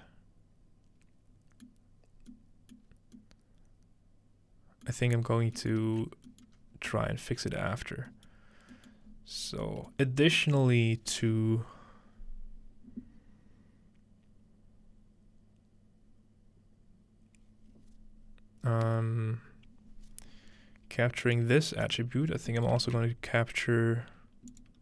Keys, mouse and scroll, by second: 2.1-2.8 scroll down 1, 2.8 middle click, 2.9 scroll up 2, 5.0 middle click, 5.1-6.6 scroll down 2, 5.9 ctrl+space, 6.6-7.5 scroll up 1, 8.1 scroll up 1, 8.3-8.9 scroll down 2, 9.1 scroll up 1, 9.2 scroll, 9.4 scroll up 2, 10.1 scroll down 2, 21.3 click, 22.7-24.2 shift+middle drag, 22.8 shift+d, 24.5 click.